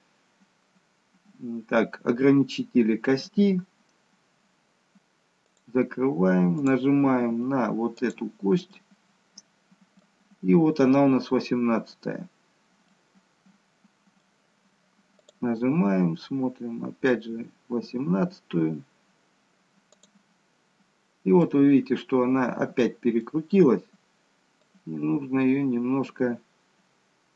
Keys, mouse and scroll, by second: 5.5 click, 6.7 click, 8.8 middle click, 10.5-11.6 scroll up 2, 11.6-12.4 scroll down 1, 12.4-12.9 scroll down 1, 12.9 middle click, 15.3 click, 21.5-22.4 scroll down 1, 22.4 middle click, 24.8 click.